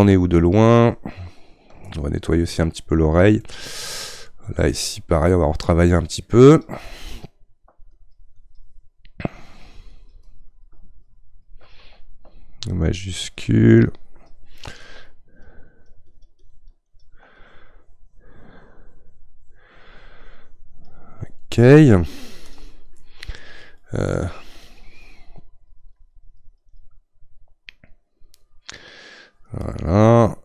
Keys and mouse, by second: 6.6-30.4 drag.